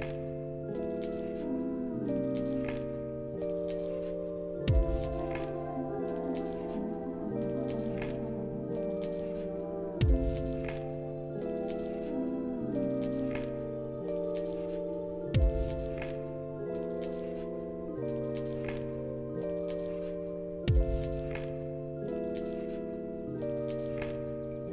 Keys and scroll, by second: 9.6 ctrl+z, 15.4 z, 15.9 alt+x, 19.8 1, 20.1 5, 22.0 8, 22.3 Return, 23.7 z.